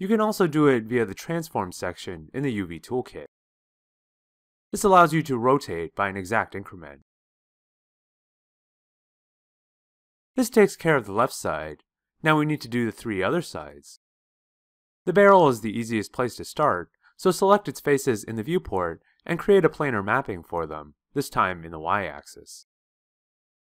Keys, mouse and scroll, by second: 21.1-23.7 shift+drag.